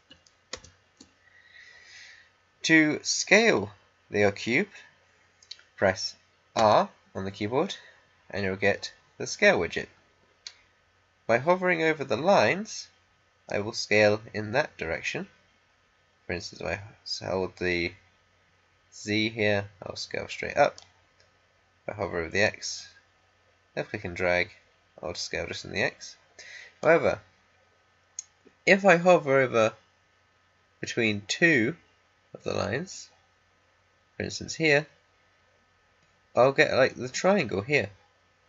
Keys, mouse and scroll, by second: 0.5 ctrl+z, 6.5 r, 13.4-29.1 drag.